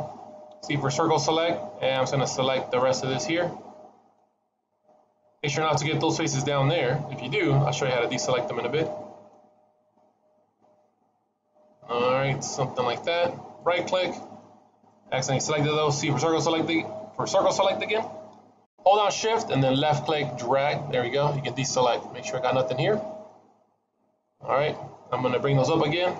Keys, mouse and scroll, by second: 0.4 c, 14.1 middle click, 15.8 c, 21.7 middle click, 22.5 middle click, 23.3 middle click.